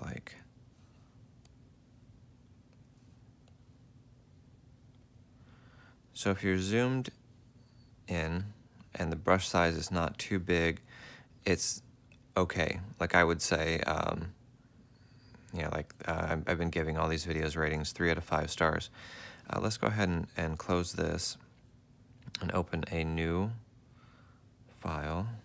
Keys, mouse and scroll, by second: 1.3 space, 14.4 ctrl+z, 15.2 ctrl+z.